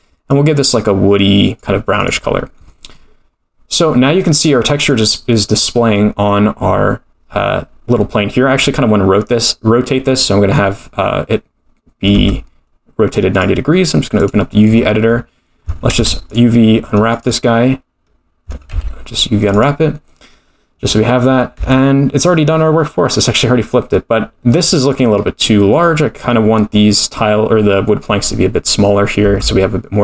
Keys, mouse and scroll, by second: 2.0 click, 2.4-2.8 scroll down 4, 2.6-4.8 middle drag, 4.8 click, 12.1 Tab, 13.3 click, 14.7-15.3 scroll down 12, 15.9 u, 18.7 u, 21.5 Tab, 24.5-25.2 middle drag, 25.2-26.4 scroll up 2, 26.4 scroll down 1, 26.5-27.5 scroll down 2, 29.3 Tab.